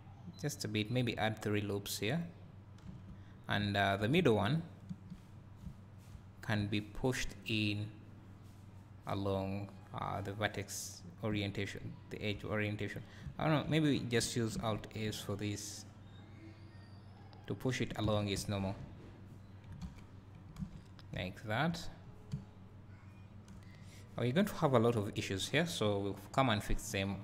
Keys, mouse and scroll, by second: 2.2 click, 2.9 1, 3.3 scroll up 2, 3.6 `, 4.5 alt+click, 5.3 scroll down 1, 10.2-17.7 drag, 11.6 `, 14.6 alt+s, 18.0 Tab, 19.0 scroll up 1, 20.9 scroll down 1, 21.3 `, 22.0 scroll down 1, 22.3 `, 23.9-24.6 scroll up 2, 24.6-26.7 scroll up 1, 26.7 click.